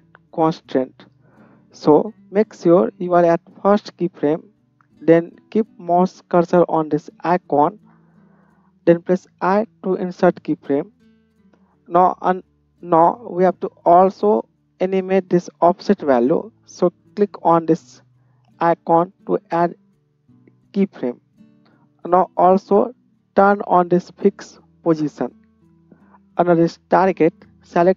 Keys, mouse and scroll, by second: 10.3 i, 24.9 middle click, 24.9 right click, 27.1-27.9 middle drag, 27.1-27.9 right drag.